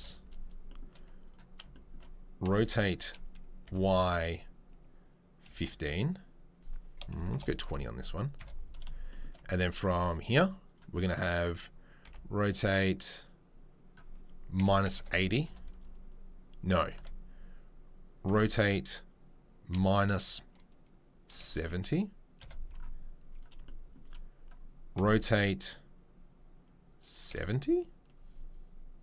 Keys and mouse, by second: 0.5-0.9 shift+middle drag, 1.3-9.5 shift+middle drag, 2.4 r, 9.5-29.0 right drag, 12.0 r, 17.0 ctrl+z, 18.2 r, 23.3 click, 24.9 r.